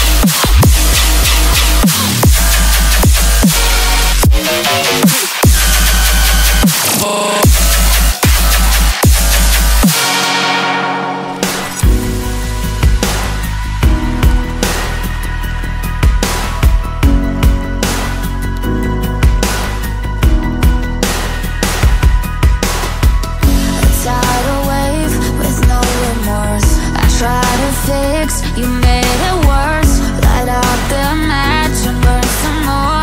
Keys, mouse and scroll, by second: 2.8 middle click, 14.4 middle click, 20.7 middle click.